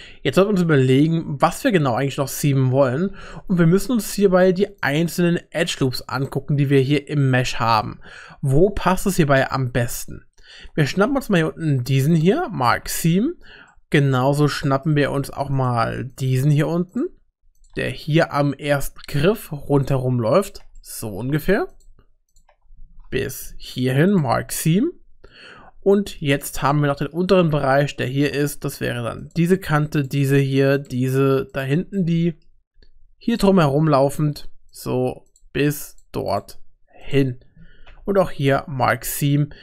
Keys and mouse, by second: 2.1 middle click, 3.3 middle click, 4.2 2, 4.8 alt+click, 11.0 u, 13.7 shift+middle click, 13.8 shift+click, 14.2 middle click, 14.6 shift+middle click, 14.8 shift+click, 15.6 click, 16.1 shift+click, 17.9 middle click, 20.4 shift+click, 20.8 middle click, 21.7 shift+click, 22.3 shift+click, 23.4 u, 24.5-26.2 middle drag, 26.7 middle click, 27.9 shift+middle click, 29.2 click, 30.8 shift+click, 32.0 middle click, 32.4 click, 33.7 middle click, 35.9 shift+click, 36.3 shift+click, 37.0 shift+click, 37.9 u, 39.2-39.6 middle drag.